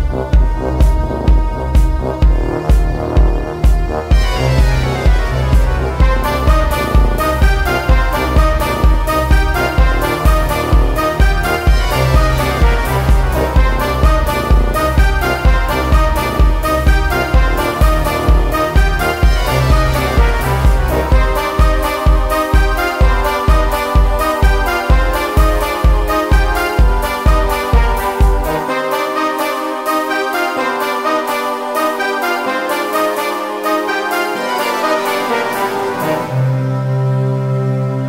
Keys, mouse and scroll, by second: 0.0-5.0 typing, 1.4 click, 1.8 Tab, 1.8 click, 3.9 click, 4.1 Tab, 5.8 click, 6.1-7.2 middle drag, 7.2 right click, 7.8 KP_Divide, 8.8 middle click, 9.6 KP_7, 10.3 click, 10.6 ctrl+s, 11.1 alt+F3, 12.2 middle click, 12.2-13.6 typing, 12.3 Tab, 15.2 middle click, 15.6 z, 15.7 middle click, 17.3 ctrl+e, 18.0 click, 18.5 middle click, 18.5 click, 18.5 l, 18.8 KP_7, 20.0 alt+s, 20.1 Tab, 21.0 Tab, 21.3-23.3 typing, 21.5 Tab, 21.7 click, 25.2 Tab, 26.0 ctrl+alt+shift+m, 26.3 e, 27.0 click, 27.6 Tab, 28.2 s, 28.9 KP_1, 29.2 KP_3, 31.6 KP_7, 31.7 shift+space, 32.3 ctrl+s, 32.8 alt+F3, 32.8 a, 33.4 middle click, 34.0 z, 34.2 z, 34.8 s, 35.4 click, 35.6 middle click, 36.0 a, 37.1 click, 37.7 middle click.